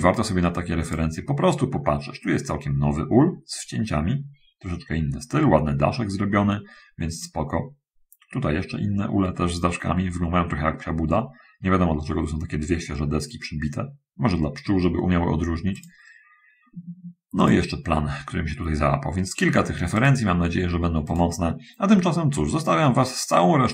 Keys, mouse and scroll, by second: 1.1 click, 7.4 click, 16.0 click, 17.6 click, 19.8 click, 22.4-22.8 scroll up 2, 22.8-23.7 middle drag.